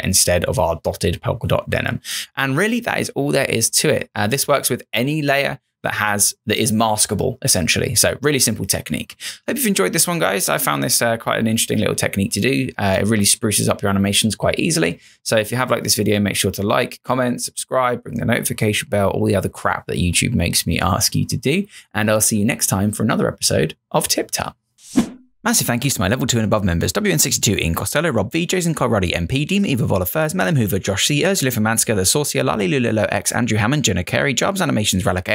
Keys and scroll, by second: 4.4 Return.